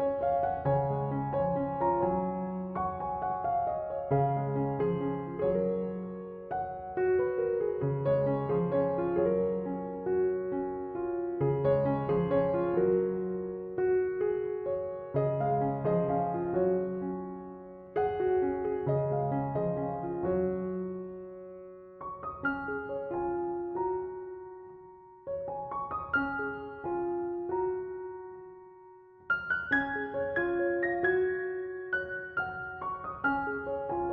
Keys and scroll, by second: 33.6 BackSpace.